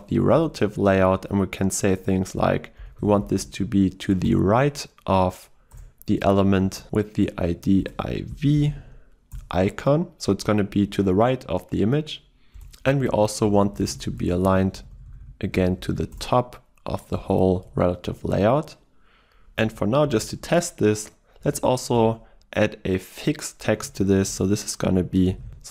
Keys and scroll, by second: 4.3 Return, 9.4 Return, 16.2 Return, 22.0 Return.